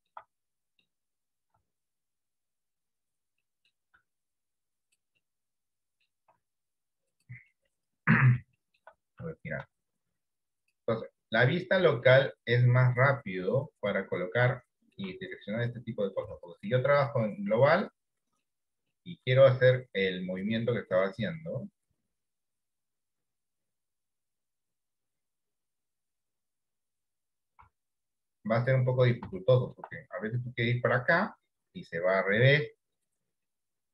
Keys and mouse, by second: 0.5 middle click, 1.6 r, 3.5 middle click, 4.1 r, 5.3 middle click, 7.7 middle click, 7.7 r, 8.7 middle click, 9.7 r, 11.0 middle click, 12.4 middle click, 13.3 click, 15.1 shift+middle click, 16.9-18.0 drag, 19.2 middle click, 21.1 middle click, 22.4-24.1 drag, 24.8-26.1 drag, 27.7 r, 29.7 shift+middle click, 32.4 r, 33.7 middle click.